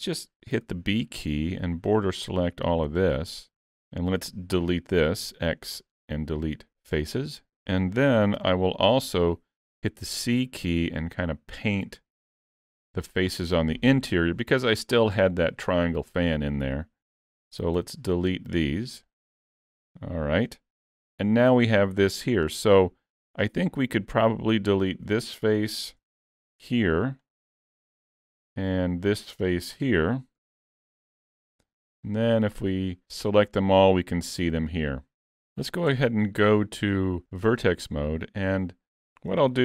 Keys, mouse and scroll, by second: 0.6 b, 7.0 x, 8.4 c, 17.8 x, 21.0 a, 21.7 scroll up 2, 21.9 shift+middle click, 24.2 click, 26.4 x, 28.1 a, 29.4 click, 30.4 x, 31.8 a, 35.9 1.